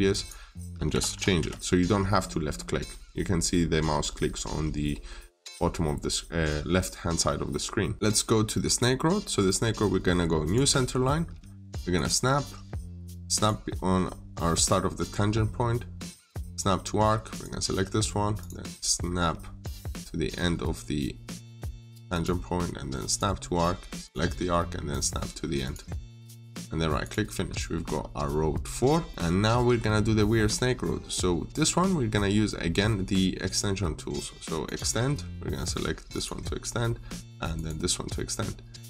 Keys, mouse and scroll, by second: 0.5-1.5 typing, 5.2 middle click, 7.1 middle click, 7.9-8.4 scroll down 1, 8.4 middle click, 10.3 click, 13.8-15.5 scroll up 1, 16.3 scroll up 1, 16.3 click, 26.2 right click, 26.9 click, 27.2 scroll down 1, 27.4 middle click, 27.8-28.1 scroll up 1, 28.6 scroll down 1, 28.9 middle click, 29.2-30.3 scroll down 1, 30.3-30.9 scroll up 1, 34.5 click.